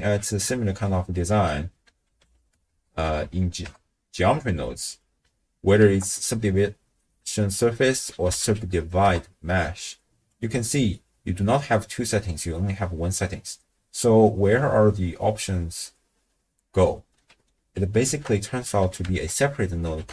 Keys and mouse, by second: 0.2 middle click, 1.3 ctrl+a, 3.2 Down, 4.9 click, 5.8 ctrl+a, 10.6 middle click, 17.2 middle click, 18.1 ctrl+a.